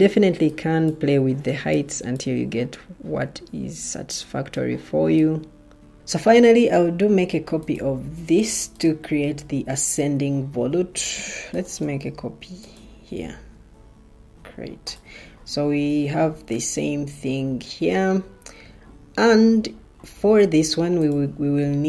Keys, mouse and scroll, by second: 10.4 ctrl+d.